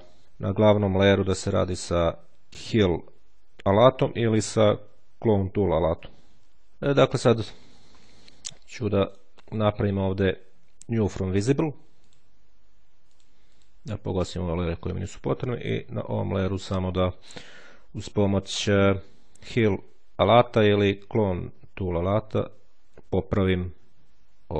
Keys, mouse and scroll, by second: 0.2 click, 0.6 click, 8.9 right click, 11.9 click, 13.0-14.0 drag, 14.5 click, 15.4-16.4 ctrl+scroll up 1, 21.9 click, 22.7 scroll down 1, 22.9 [, 24.0 ctrl+click.